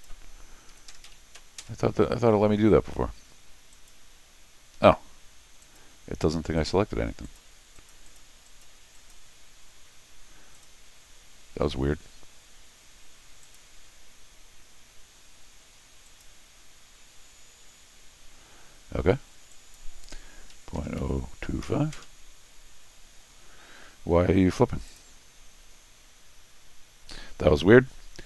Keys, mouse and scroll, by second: 3.7 click, 5.6 click, 6.6 click, 7.2 click, 7.8 click, 8.1 click, 8.5 click, 9.0 click, 10.5 click, 13.4 click, 16.1 click, 19.5 click, 24.9 click.